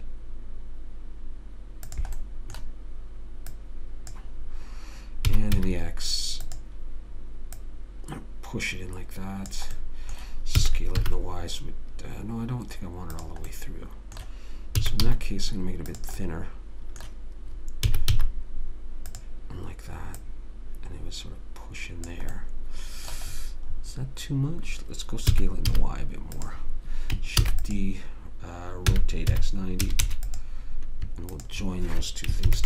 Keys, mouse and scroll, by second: 3.9 click, 5.6 s, 7.9 click, 10.1-12.9 middle drag, 11.0 s, 13.9-15.4 middle drag, 15.1 s, 16.9 middle click, 18.3 s, 20.5 click, 22.7 middle click, 25.7 s, 27.8 shift+d, 29.3 r, 31.7-32.6 drag.